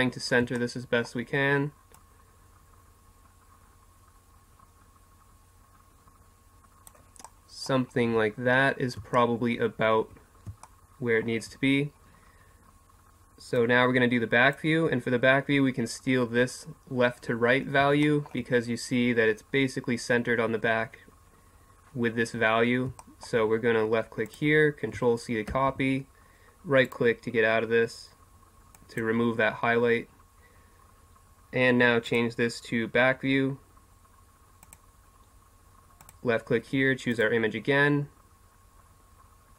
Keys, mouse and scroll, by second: 0.4 middle click, 1.9-3.7 drag, 7.3-10.7 middle drag, 10.9-13.6 middle drag, 13.6-18.0 drag, 18.0-24.3 middle drag, 24.3-32.1 drag, 33.7-36.0 drag, 37.6-39.5 drag.